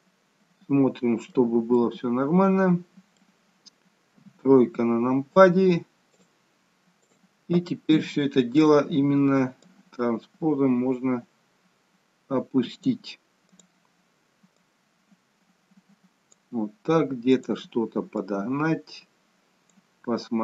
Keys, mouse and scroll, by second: 1.7 middle click, 4.1 KP_3, 6.1 click, 7.1 click, 13.5 click, 14.5 click.